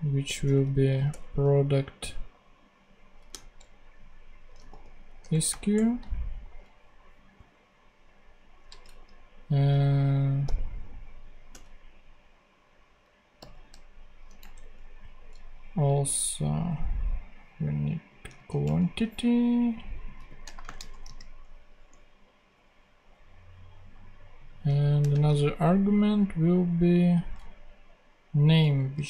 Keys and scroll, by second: 0.3 shift+p, 1.0 Return, 4.2-5.4 typing, 5.1 Return, 5.6 Return, 8.6 q, 10.3 u, 13.3 n, 14.3 ctrl+n, 14.5 ctrl+Tab, 18.2 super+c, 18.5 ctrl+super+Tab, 19.4 ctrl+Tab, 20.1 super+v, 20.4 shift+super+;, 20.5 shift+space, 20.8 shift+|, 20.9 ,, 25.0 space, 28.9-29.0 typing.